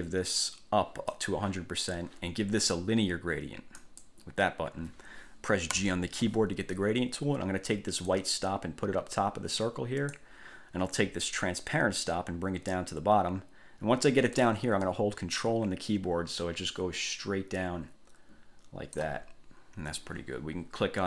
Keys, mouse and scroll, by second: 0.6 click, 4.0 click, 5.9 g, 8.3-10.6 drag, 11.8-19.4 drag.